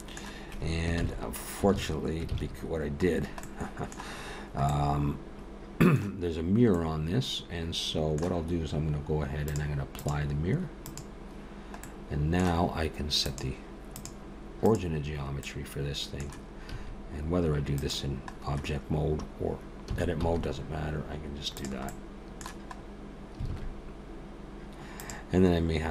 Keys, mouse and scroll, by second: 1.0 ctrl+z, 1.7 ctrl+z, 2.3 ctrl+z, 3.2 scroll down 1, 3.4 middle click, 4.7 middle click, 6.7 middle click, 9.5 click, 10.0 click, 10.8 click, 11.8 middle click, 13.2 click, 15.4 middle click, 16.7 a, 17.8 click, 19.9 s, 21.9 middle click, 22.8 scroll up 1, 23.5 alt+a, 25.0 click.